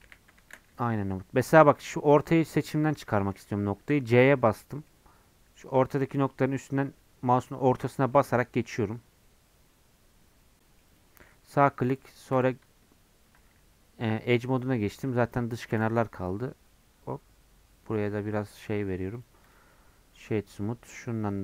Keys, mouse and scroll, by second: 1.9-3.1 middle drag, 3.1 1, 15.7 ctrl+b, 18.1 Tab, 18.4 scroll down 1, 18.9-19.5 scroll up 1, 19.5 right click, 20.5-21.4 drag.